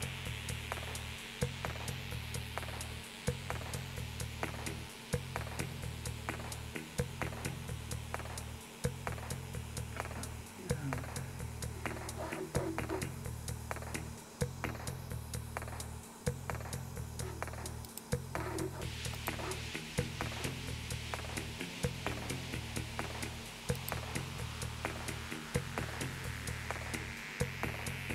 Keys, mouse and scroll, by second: 17.9 click, 19.4-19.7 drag, 23.8 click, 25.4-26.8 scroll down 3, 27.5-28.1 scroll down 2.